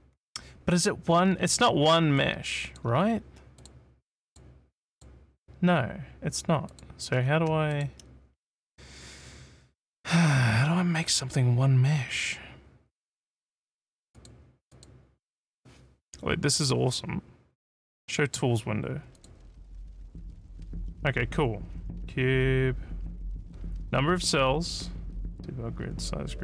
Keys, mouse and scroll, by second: 1.6 alt+middle click, 2.2 alt+click, 3.6 click, 4.3 click, 4.9 click, 6.7 click, 7.8 shift+click, 14.2 click, 14.7 click, 19.2 click.